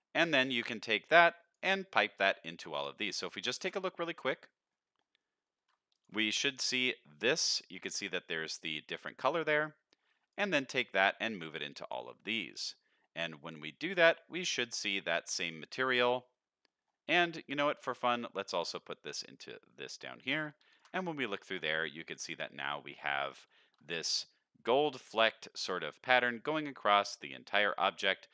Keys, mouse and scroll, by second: 0.7-1.5 drag, 1.8 middle click, 2.1-2.8 scroll down 2, 2.5 middle click, 2.9 middle click, 3.5 ctrl+shift+click, 4.5 middle click, 4.8 scroll down 1, 5.2 middle click, 5.9 ctrl+shift+click, 9.4 middle click, 10.1 click, 10.8-11.9 drag, 12.6-13.5 drag, 14.5 click, 15.8 middle click, 16.4 scroll down 1, 16.6 middle click, 18.0-19.4 drag, 19.8 middle click, 20.7 ctrl+shift+click, 21.4 alt+a, 21.8-22.2 middle drag, 23.5 shift+middle drag, 23.9 middle drag, 25.1 middle click, 26.4 middle click, 28.0 middle click.